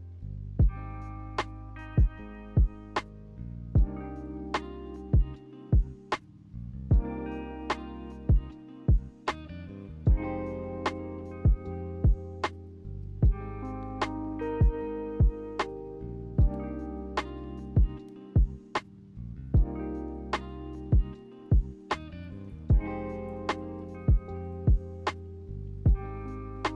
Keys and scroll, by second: 0.0 b, 3.1 b, 6.8 n, 9.3 n, 16.8 b, 18.6 a, 21.8 a, 25.1 n.